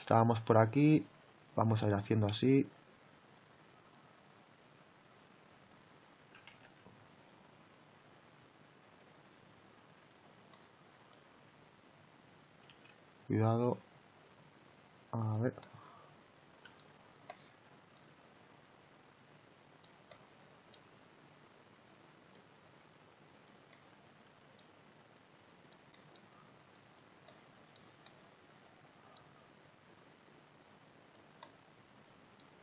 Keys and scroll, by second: 6.6 ctrl+z, 12.7 ctrl+z.